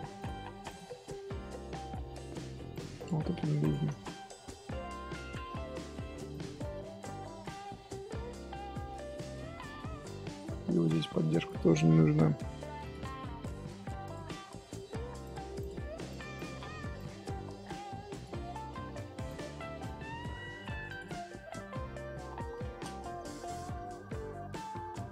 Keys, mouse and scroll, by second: 0.1 click, 0.6 shift+click, 2.0 j, 2.7 click, 2.9 shift+click, 3.3 x, 3.9-5.9 shift+middle drag, 5.9 1, 6.3 click, 6.5-8.8 middle drag, 8.8 scroll down 1, 9.0 scroll up 1, 9.0 scroll down 1, 9.1-11.3 middle drag, 11.3 click, 11.7 middle click, 12.5 g, 13.3 middle click, 14.0 click, 15.6 click, 15.9 g, 16.3 click, 18.4 middle click, 18.9-19.2 scroll up 1, 19.2 click, 21.3 middle click, 22.0 KP_3, 22.6 scroll up 1, 23.4 g.